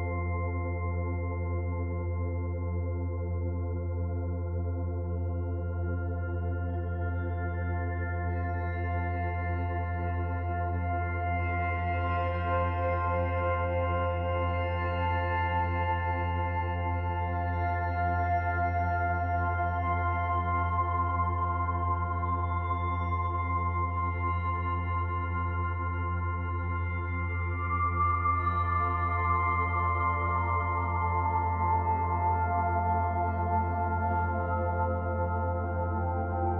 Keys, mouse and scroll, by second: 0.6 click, 1.7 click, 13.9 click, 16.6 click, 19.8 scroll down 1, 20.1 middle click, 22.9 click, 31.2-31.9 scroll down 3, 31.9-32.9 scroll down 2, 32.9 click, 32.9-34.1 scroll down 1.